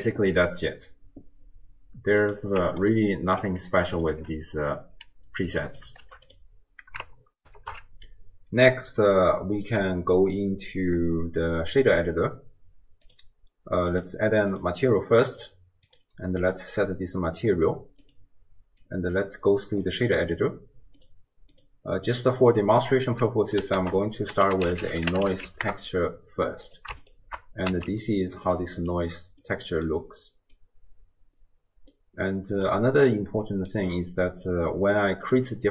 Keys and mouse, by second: 2.4-6.3 drag, 7.5 ctrl+alt+shift+q, 11.8-13.2 drag, 13.9 click, 14.6 drag, 15.9 click, 18.1-19.1 drag, 19.9 middle click, 21.0-21.3 drag, 21.6 click, 22.6-23.1 middle drag, 23.8 ctrl+a, 27.0 ctrl+shift+click, 27.7 z, 29.6 middle click, 30.6-31.9 drag, 32.4 click, 33.5 click, 33.5 right click, 35.6-35.7 drag, 35.6-35.7 right drag.